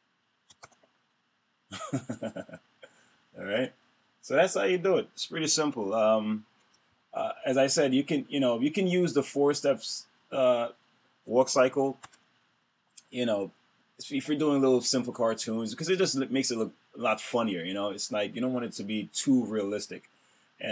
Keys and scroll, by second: 0.4 super+Return, 6.6 F5, 11.9 super+Return.